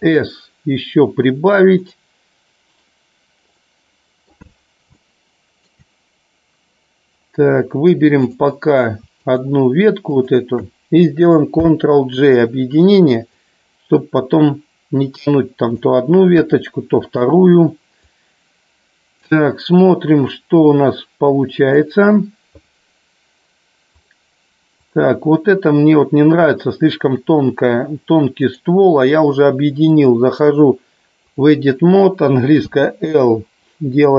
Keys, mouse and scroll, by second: 3.6-4.2 middle drag, 5.0 shift+middle click, 11.5 ctrl+j, 13.2-15.7 drag, 16.4 KP_1, 18.1-19.2 drag, 20.2-21.7 drag, 24.8 click, 28.6-30.1 drag, 31.2 click.